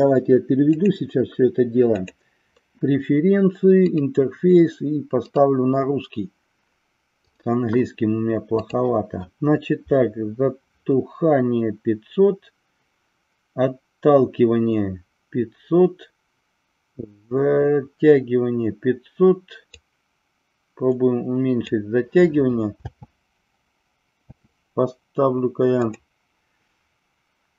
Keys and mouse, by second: 0.8-2.6 drag, 19.8-21.6 drag, 22.8 space, 25.9-27.5 drag.